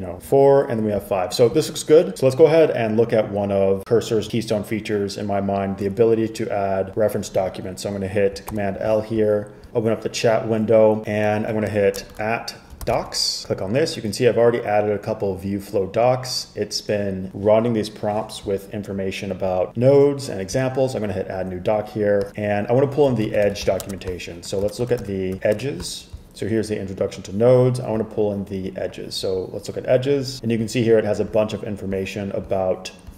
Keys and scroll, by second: 8.6 super+l, 12.0-13.5 typing, 23.3-24.3 typing, 24.9 shift+super+[, 25.1 shift+super+[, 25.3 shift+super+], 25.5 shift+super+].